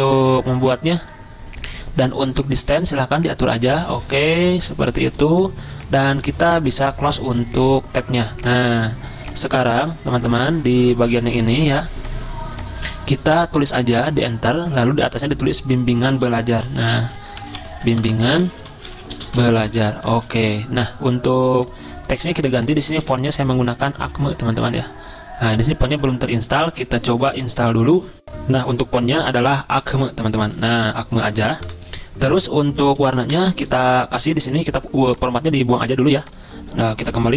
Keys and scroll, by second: 14.6 Return, 16.2-24.4 typing, 26.0 typing, 28.2 ctrl+z, 29.6-31.6 typing, 32.7-33.5 typing, 36.0-37.3 typing.